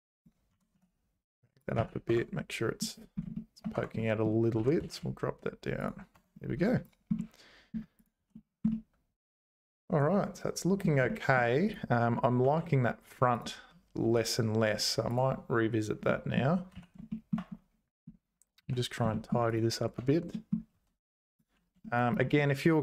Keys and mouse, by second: 0.5 g, 1.8 z, 2.1 Tab, 2.3 middle click, 3.3 shift+click, 3.7 Tab, 4.0 middle click, 4.6 g, 6.1 Tab, 7.2 middle click, 8.2 h, 8.7-10.9 middle drag, 11.2 shift+middle click, 12.4 alt+h, 14.0 h, 16.1 middle click, 16.7 z, 17.1 shift+middle click, 18.6 z, 19.1 middle click, 19.5 click, 20.0 Tab, 20.3 middle click, 20.7 1, 21.9 shift+middle click, 22.4 middle click.